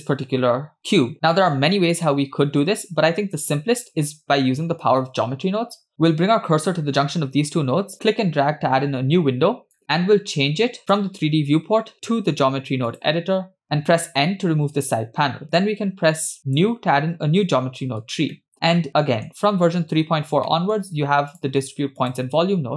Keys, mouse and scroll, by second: 2.1-2.8 shift+middle drag, 8.0-9.8 drag, 10.8-13.1 drag, 14.6 n, 16.5 click, 17.8-18.7 scroll up 5, 18.3 middle click, 18.8 middle click, 20.5-20.9 middle drag, 21.3 click, 22.0 click.